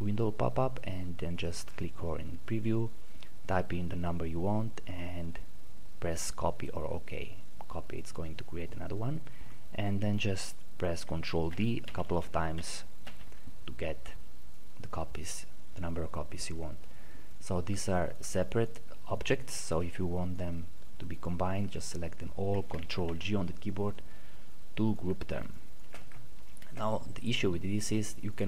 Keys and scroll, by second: 11.6 ctrl+d, 22.8 ctrl+g.